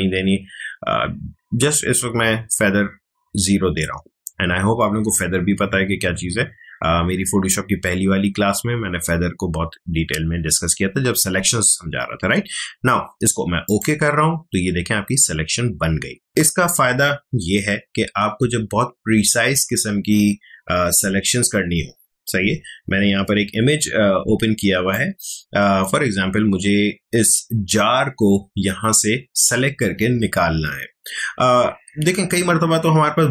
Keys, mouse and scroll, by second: 16.3 ctrl+alt+z, 20.8 ctrl+Tab, 24.6 space, 24.9 click, 25.1 space.